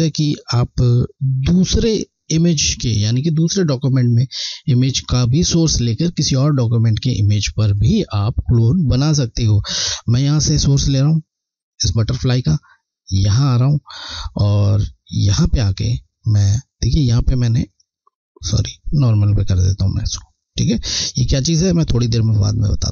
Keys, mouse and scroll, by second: 11.7 alt+Left, 13.2 click, 17.6 click, 17.7 click.